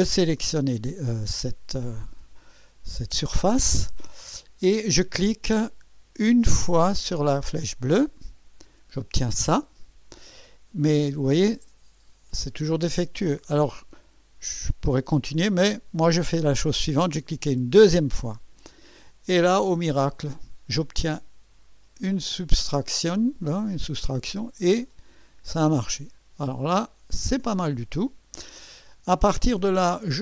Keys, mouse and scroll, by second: 0.2 click, 1.5-3.5 drag, 7.9 click, 17.5 click, 19.5-21.3 drag, 23.7-27.4 drag, 27.8 click, 29.4 click, 30.0 click.